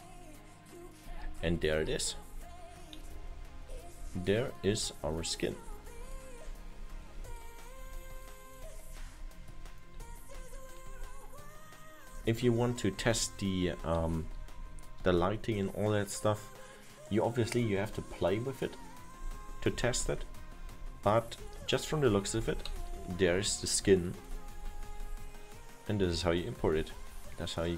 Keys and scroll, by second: 1.2 Right, 2.4 Right, 3.3 Left, 8.6 Left, 10.5 Up, 10.9 Down, 12.2 Left, 13.1 Up, 13.7 Right, 13.8 Up, 14.3 Left, 20.2 Up, 21.0 Left, 22.5 Up, 22.8 Left, 22.9 Down, 23.8 Left, 26.1 Right.